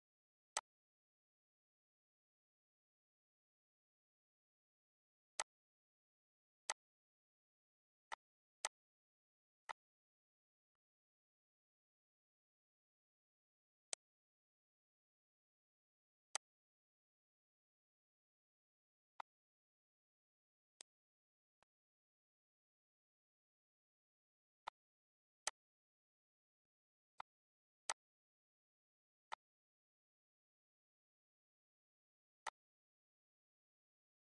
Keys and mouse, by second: 0.5 click, 0.9 ctrl+s, 5.3 click, 6.6 shift+click, 8.0 shift+click, 8.5 click, 9.6 click, 10.6 shift+click, 13.8 click, 16.3 click, 19.1 click, 20.7 click, 21.5 click, 22.1 ctrl+s, 23.9 z, 24.6 click, 25.4 click, 26.6 click, 27.8 click, 29.2 ctrl+click, 32.4 click.